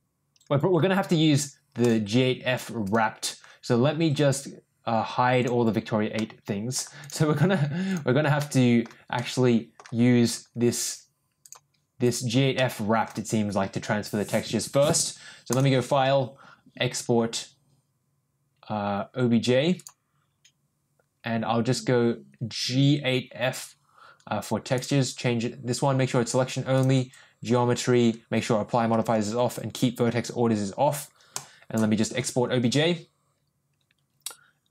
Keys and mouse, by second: 1.8 click, 2.5 click, 2.8 click, 5.4 click, 6.1 middle click, 7.8 click, 8.3 middle click, 9.1 middle click, 11.4 click, 12.5 middle click, 15.6-19.9 drag.